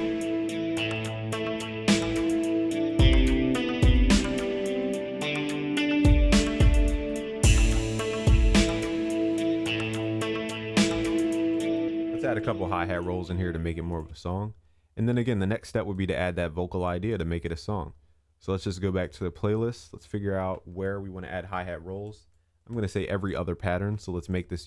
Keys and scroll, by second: 4.7 ctrl+s, 12.2 ctrl+s.